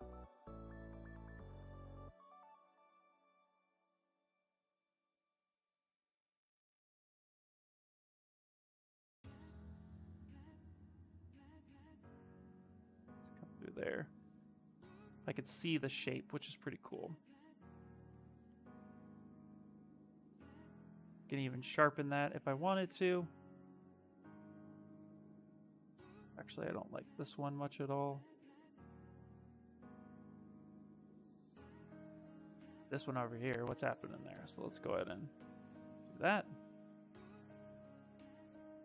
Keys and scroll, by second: 24.5 s, 27.5 s, 29.0 s, 35.0 s, 37.1 ctrl+z.